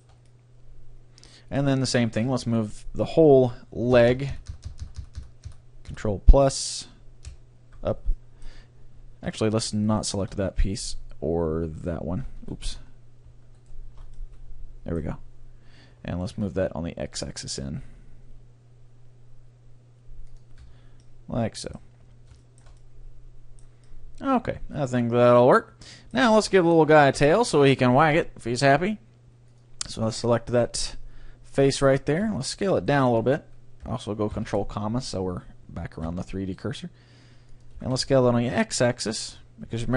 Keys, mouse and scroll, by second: 2.4 Tab, 4.0 ctrl+KP_Add, 4.1-5.4 ctrl+KP_Add, 6.0 ctrl+KP_Add, 7.3 ctrl+KP_Add, 8.1-12.2 middle drag, 10.0-11.6 right drag, 11.8-15.4 right drag, 12.6 ctrl+z, 12.8-17.1 middle drag, 16.3 g, 20.8 Tab, 21.0-22.8 middle drag, 23.2-25.8 middle drag, 26.6-29.6 middle drag, 27.2 Tab, 29.6-31.4 drag, 30.2-32.0 right drag, 30.6-32.3 middle drag, 32.3 s, 32.9-34.7 right drag, 34.3 ctrl+,, 36.0 s, 37.6-39.3 drag, 37.8 s.